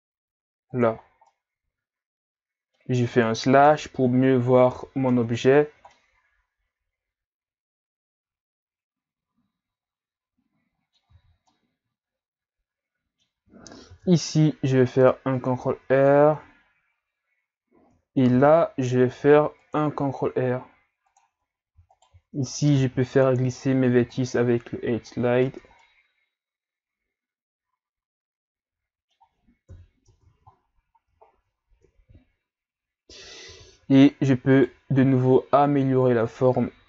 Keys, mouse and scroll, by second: 1.0 scroll down 3, 1.3-3.6 middle drag, 3.6 KP_Divide, 4.7 KP_Divide, 5.1 Tab, 5.7 scroll down 1, 5.9-8.9 middle drag, 11.1 Tab, 11.5-13.9 middle drag, 13.9 ctrl+r, 18.3 ctrl+r, 21.9 alt+right click, 22.7 ctrl+e, 25.3-25.8 scroll down 4, 25.8-28.8 middle drag, 29.7 KP_3, 30.0 Tab, 30.7-31.3 scroll up 1, 31.3 scroll down 2, 31.5-31.9 scroll up 2, 33.5 z, 33.9-34.5 scroll up 1, 34.5 scroll up 1, 34.5 right click, 35.0 b, 36.3 click.